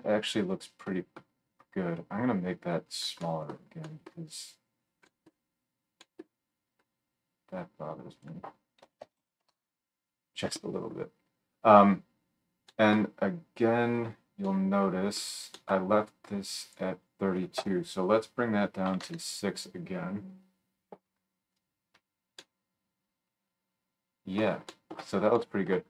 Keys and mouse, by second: 3.2 middle click, 4.1 click, 4.8-15.7 right drag, 8.1-15.7 drag, 8.1-25.0 middle drag.